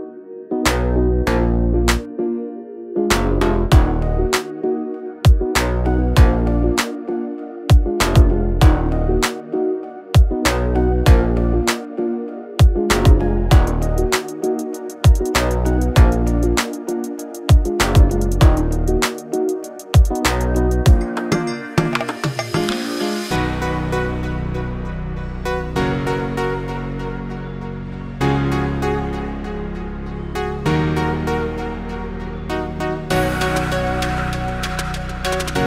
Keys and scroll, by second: 0.2 e, 1.0 space, 2.0 m, 2.6 Up, 4.5 Escape, 5.2 Up, 5.7 space, 7.4 m, 7.9 Up, 8.7 2, 9.0 Return, 12.3 Up, 12.9 2, 13.2 Return, 14.3 Up, 15.0 2, 15.3 0, 15.5 Return, 15.9 space, 17.7 m, 19.0-21.8 typing, 22.0 Return, 23.7 2, 24.1 Return, 24.5 space, 25.4 m, 26.1 Up, 26.9-29.5 typing, 27.1 Return, 29.0 Return, 31.1 f, 32.7 Escape, 32.9 space.